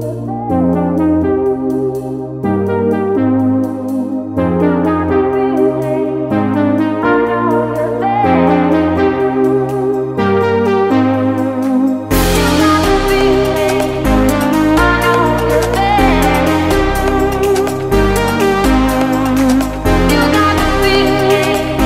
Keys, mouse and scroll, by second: 0.1 right click, 1.3 click, 6.1 click, 13.2 Delete, 13.9 click, 15.2 Delete, 15.6 click, 16.5 Delete, 16.8 click, 18.6 ctrl+s, 20.2 click.